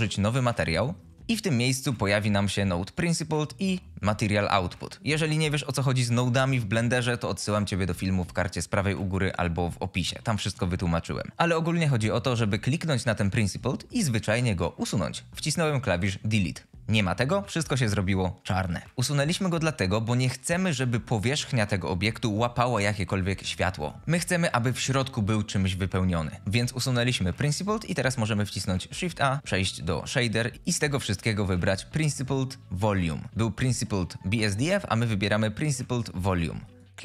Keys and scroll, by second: 15.0 Delete, 28.3 shift+a.